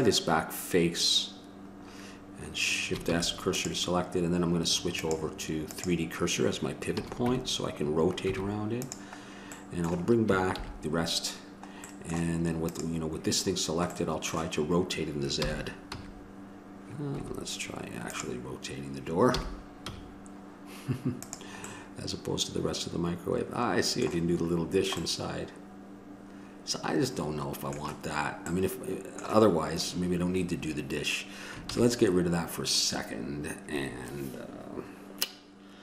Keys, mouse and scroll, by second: 0.1-2.3 right drag, 3.3 shift+s, 6.7 click, 7.2 a, 7.5 Tab, 8.5 Tab, 10.8 alt+h, 12.9-14.8 drag, 15.6 r, 24.9-27.3 middle drag, 28.8-31.9 middle drag, 31.9 ctrl+z.